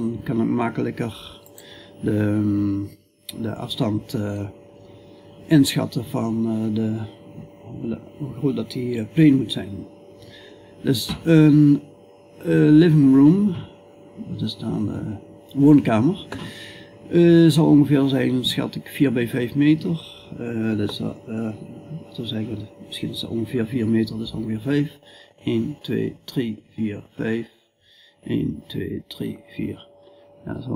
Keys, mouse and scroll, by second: 6.8 middle click, 6.8 scroll down 1, 7.1-18.2 middle drag, 8.4-16.6 scroll up 1, 16.6-18.1 scroll up 1, 18.1 scroll up 1, 29.8 s.